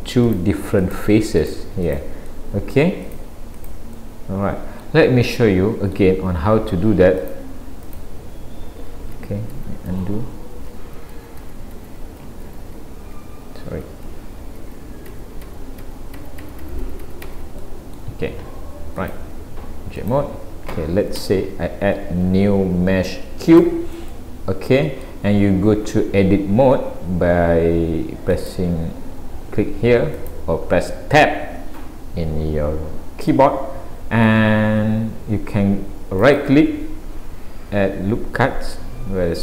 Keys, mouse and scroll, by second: 0.3 click, 0.8 click, 1.4 click, 1.9 click, 2.3 middle click, 3.1 click, 3.6 click, 4.0 middle click, 5.3 middle click, 7.2 click, 7.9 click, 9.2 ctrl+z, 10.3-10.9 scroll down 4, 10.8 ctrl+z, 12.5 z, 14.6 ctrl+z, 15.1 ctrl+z, 17.6 middle click, 19.0 click, 21.2 Delete, 22.1 shift+a, 24.1 middle click, 28.4 click, 33.3 middle click, 34.8-36.0 scroll up 1, 36.3 right click.